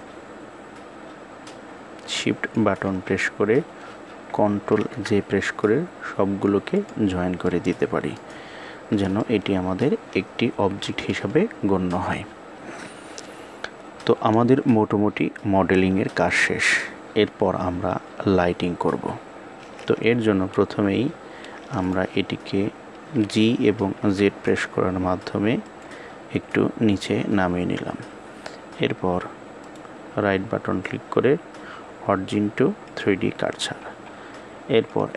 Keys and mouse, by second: 1.2-2.2 shift+drag, 4.4 ctrl+j, 6.4 click, 7.1-7.8 middle drag, 8.9-9.5 middle drag, 10.4 KP_1, 29.3-32.7 right drag, 34.6-35.1 drag.